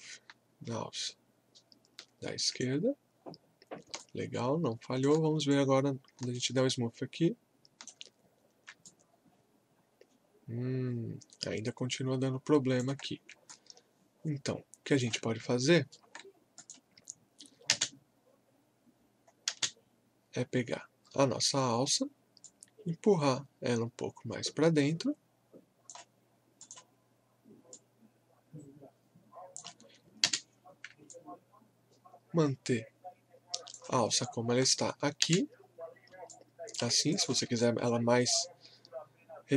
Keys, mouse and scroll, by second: 3.3 scroll down 1, 4.0-6.3 alt+drag, 4.3 typing, 6.3-8.8 shift+right drag, 8.8-13.3 alt+drag, 13.3 scroll up 1, 13.5-15.4 alt+drag, 15.4 alt+scroll up 1, 15.7 alt+middle click, 16.6 click, 17.7 space, 19.3 scroll up 1, 19.5 space, 20.3 scroll up 1, 21.1 w, 22.4-30.2 drag, 30.2 space, 31.1-34.1 alt+drag, 34.1 scroll down 1, 35.2 space, 36.3 alt+click, 37.6-39.5 alt+drag.